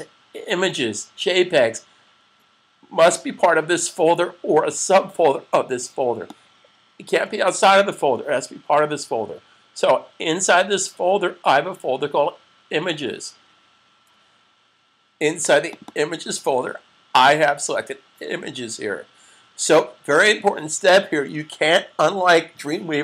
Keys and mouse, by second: 6.2 click, 15.5 click, 15.9 double click, 20.1 click.